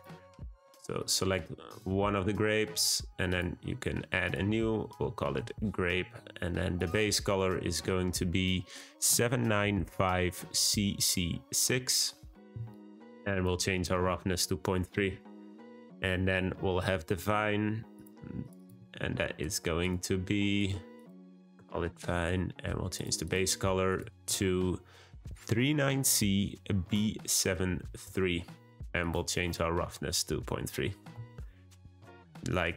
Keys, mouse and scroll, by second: 0.9 click, 1.7 click, 3.2-6.8 drag, 13.6 click, 19.8 click, 20.5-23.0 drag, 23.2 click, 29.4-32.4 drag.